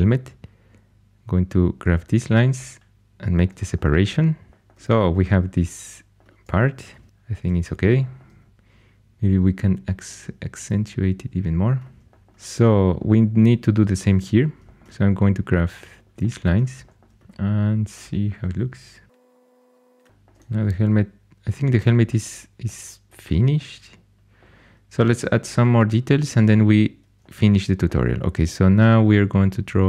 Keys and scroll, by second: 6.8 shift+super+e, 7.4 shift+super+e, 20.1 shift+super+e.